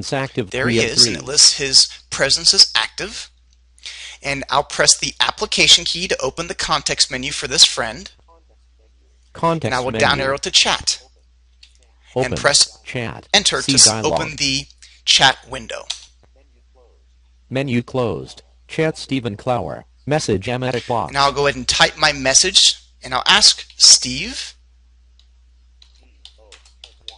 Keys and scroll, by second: 6.6 shift+F1, 10.0 Down, 13.7 Return.